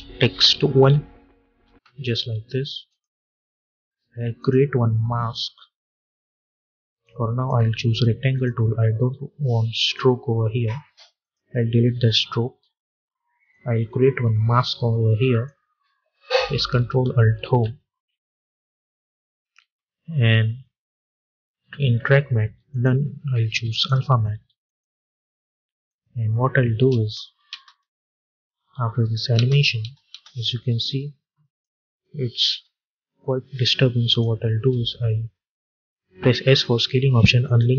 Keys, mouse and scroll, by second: 0.0-1.1 typing, 1.4 Return, 2.8-17.3 drag, 17.3 ctrl+alt+Home, 22.6-27.5 drag, 27.5 space, 30.0 space, 30.7-33.8 drag, 33.9 click, 35.4 click, 36.4 s, 37.3-37.7 drag.